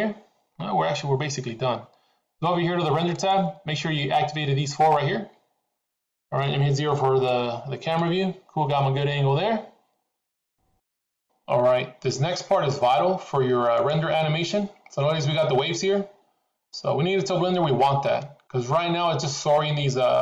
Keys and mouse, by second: 3.2 click, 7.2 KP_0, 13.6 click.